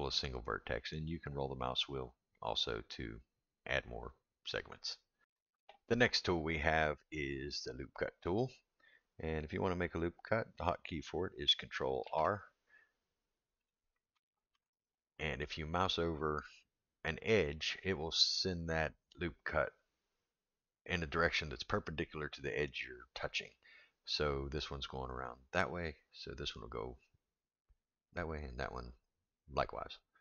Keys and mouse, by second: 13.6 drag, 14.5 ctrl+r.